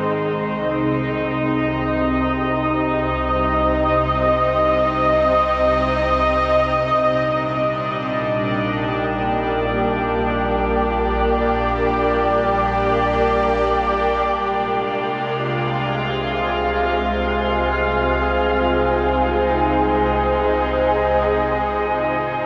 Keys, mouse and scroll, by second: 1.2 ctrl+c, 2.2 click, 5.4 ctrl+v, 6.3 click, 12.9 click, 17.2 click, 21.4 click.